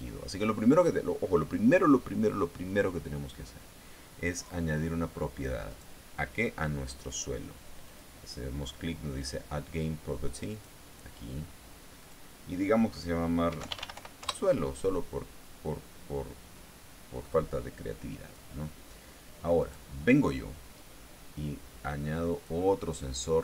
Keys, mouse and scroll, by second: 6.2 right click, 8.4 click, 10.3 click, 12.5 click, 13.8-15.0 typing, 17.1-19.0 drag, 20.1 right click, 22.8 click.